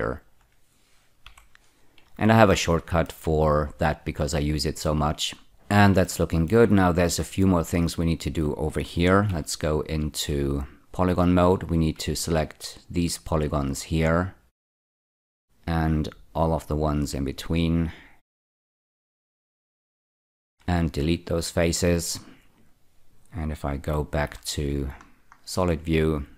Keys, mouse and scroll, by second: 0.0 ctrl+click, 1.2 ü, 2.4 shift+middle click, 5.4 middle click, 6.0 shift+middle click, 7.1 scroll up 3, 9.2 3, 11.5 click, 12.3 shift+click, 13.0 shift+click, 13.8 shift+click, 14.8 shift+click, 15.7 shift+click, 17.4 shift+click, 18.4 shift+click, 20.3 x, 21.3 click, 22.1-22.4 scroll down 4, 24.2 z, 25.0-26.3 scroll down 3.